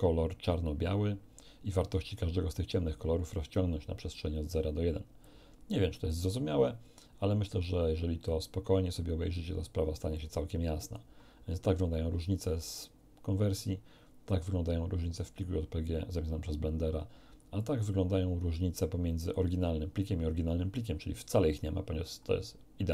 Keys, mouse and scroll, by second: 5.2 click, 7.4 click, 10.1 click, 14.2 click, 17.6-19.5 drag.